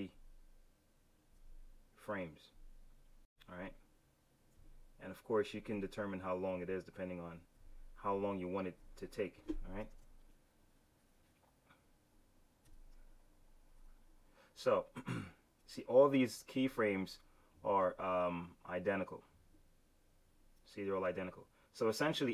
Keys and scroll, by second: 9.8 super+z, 12.5 F6.